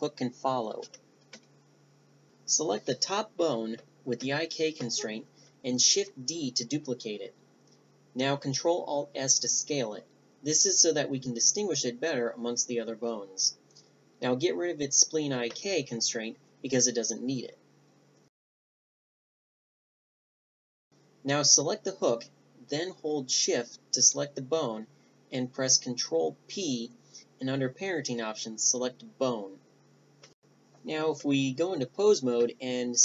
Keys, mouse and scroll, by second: 1.8-4.5 right drag, 4.5 Tab, 6.9 shift+d, 10.6 ctrl+alt+s, 15.2-19.7 drag, 16.0 Tab, 19.7 Tab, 19.7 middle click, 20.2 ctrl+alt+s, 20.5 Tab, 20.6-21.6 drag, 20.8 a, 21.7 click, 22.2-26.5 right drag, 24.2 ctrl+p, 26.5 ctrl+p, 27.0 a, 27.2 click, 27.3-28.8 middle drag, 28.8-29.4 drag, 29.2 g, 29.4-30.7 right drag.